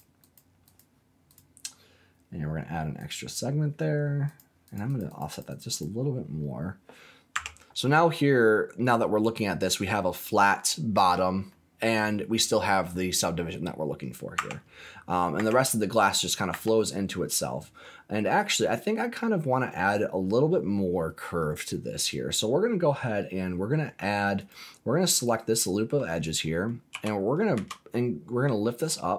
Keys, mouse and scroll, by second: 0.2 click, 0.6 click, 1.2 click, 2.9 click, 4.2 click, 4.6 click, 4.8 click, 5.0 click, 5.2 click, 5.4 click, 5.6 click, 7.3 Tab, 7.8-9.7 middle drag, 11.1-11.4 scroll down 2, 11.4 middle click, 13.6-14.0 scroll up 4, 14.3 Tab, 15.0-15.3 scroll down 2, 15.3 Tab, 16.5 Tab, 16.8-17.2 scroll up 3, 24.3 click, 25.4 alt+click, 26.9 g, 27.5 z.